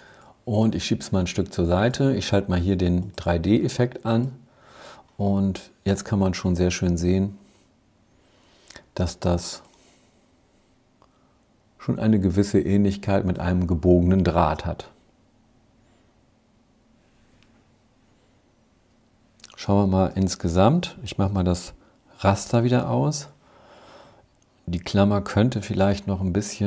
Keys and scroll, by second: 19.1 super+-, 19.7 super+-, 21.5 super+'.